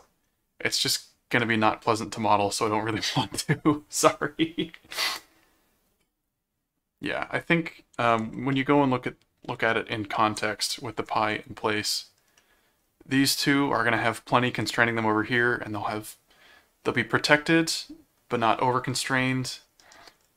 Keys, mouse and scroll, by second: 8.0 Tab, 12.4 middle click, 19.3 middle click.